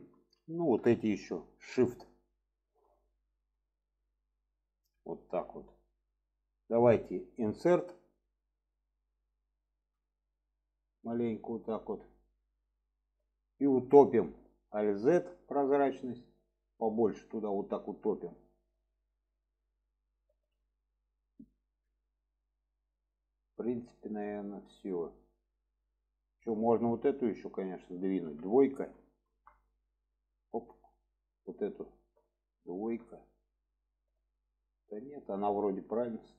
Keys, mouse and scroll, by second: 0.0 shift+middle click, 1.6-2.9 shift+drag, 3.5-4.0 shift+drag, 4.5-5.2 shift+drag, 5.9 middle click, 12.0-13.5 middle drag, 16.7-18.5 drag, 19.5-20.0 middle drag, 20.3 alt+z, 20.6-21.3 middle drag, 22.0-24.6 middle drag, 25.8 middle click, 29.8-30.3 alt+middle drag, 31.0-31.4 middle drag, 32.6 alt+shift+click, 33.7-34.4 alt+middle drag, 35.7 shift+middle click.